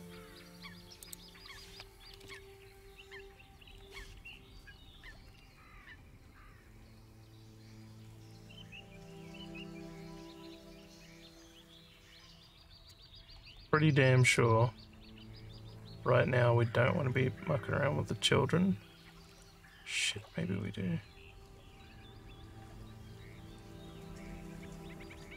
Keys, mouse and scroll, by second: 1.1 click, 13.4 scroll up 1, 13.7-25.3 alt+drag.